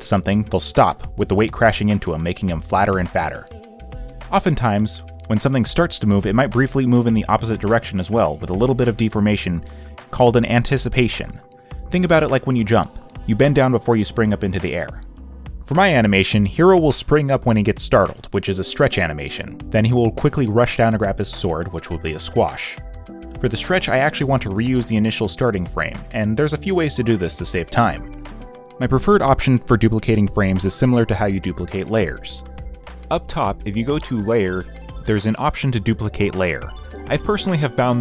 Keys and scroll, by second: 25.1 ctrl+c, 25.6 ctrl+v, 35.8 ctrl+j.